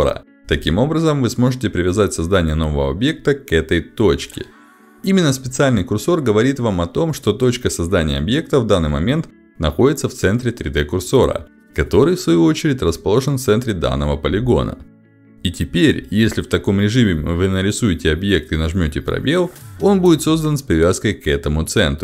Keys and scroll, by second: 16.0 space, 17.5 space.